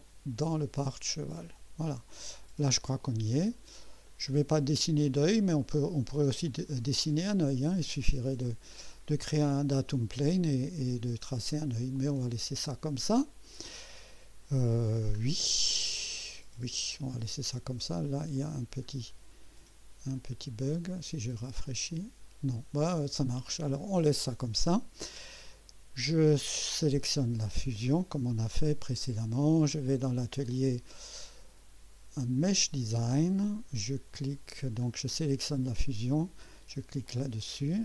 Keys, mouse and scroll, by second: 2.0 scroll down 2, 2.4 click, 3.0 click, 4.0 click, 6.2 click, 7.2 scroll up 1, 7.9 right click, 11.4-11.7 scroll down 1, 11.9-14.3 drag, 13.6-14.3 right drag, 16.8 click, 18.3 click, 18.8 scroll down 1, 20.1 click, 21.6 click, 23.8 click, 27.5 click, 28.5-29.5 right drag, 30.5 click, 32.4 click, 34.6 scroll down 1, 35.6 click, 37.0 click.